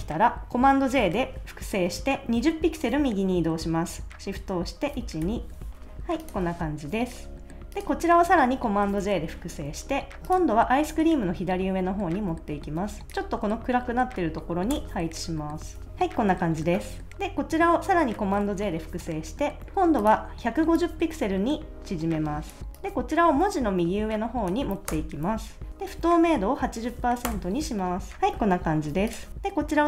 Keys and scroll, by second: 1.0 super+j, 4.9 shift+Right, 6.5 super+s, 9.0 super+j, 14.7 Return, 18.3 super+j, 24.9 Return, 26.6 8, 27.2 Return, 28.1 super+s, 29.3 Left.